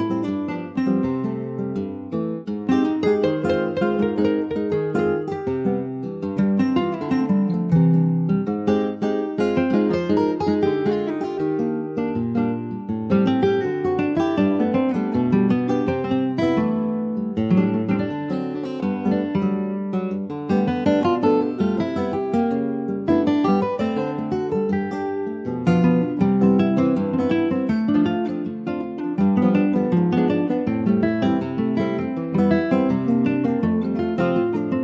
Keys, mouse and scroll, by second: 3.9-4.9 middle drag, 4.9 typing, 7.3-10.0 middle drag, 10.0 e, 12.1 middle click, 12.7 click, 13.5 middle click, 14.0 Tab, 14.2 click, 14.4 middle click, 14.9 ctrl+s, 15.6 /, 16.3 click, 16.6-17.8 middle drag, 17.8 ctrl+s, 18.0 middle click, 18.2-18.6 scroll up 2, 18.6 shift+middle click, 18.9 shift+scroll up 1, 19.1 click, 19.6 ctrl+s, 19.9-22.4 middle drag, 22.4 click, 23.8 click, 24.2-25.5 middle drag, 25.5 ctrl+s, 25.7 click, 25.9 middle click, 26.5 scroll up 1, 26.7-28.5 shift+middle drag, 28.5 click, 30.1 click, 30.5 middle click, 31.2 ctrl+s, 31.3 middle click, 32.0 ctrl+s, 32.1 click, 32.8 /, 33.1 middle click, 33.5 Tab, 33.7 middle click, 33.9-34.4 scroll up 3, 34.4 shift+middle click.